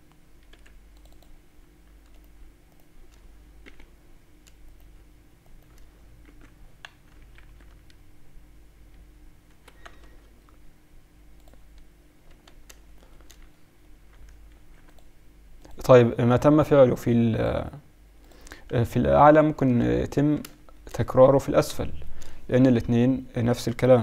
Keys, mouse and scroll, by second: 2.2-7.3 drag, 3.6 j, 6.2 j, 7.3 ctrl+r, 10.0 Tab, 11.4-13.1 drag, 12.3 Tab, 13.6 click, 14.5 ctrl+r, 20.2 Tab, 22.6-23.4 KP_Subtract.